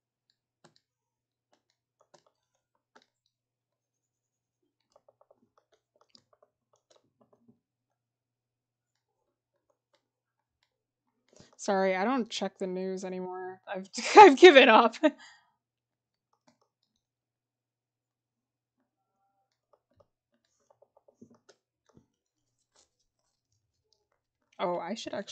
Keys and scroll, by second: 20.7-21.3 scroll down 1.